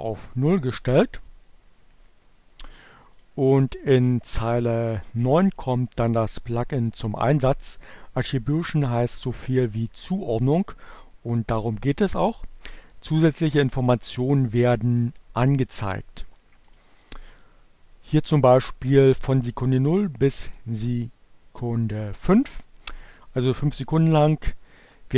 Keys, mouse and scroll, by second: 2.9 click, 15.7 click, 19.0 click.